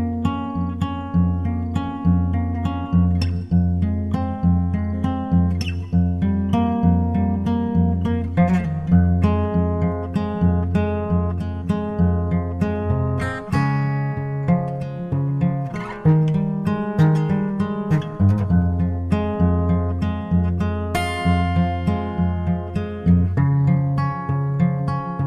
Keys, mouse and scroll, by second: 0.1 Escape, 0.8-2.7 right drag, 3.4-5.1 drag, 5.2-7.0 drag, 14.4-17.5 drag.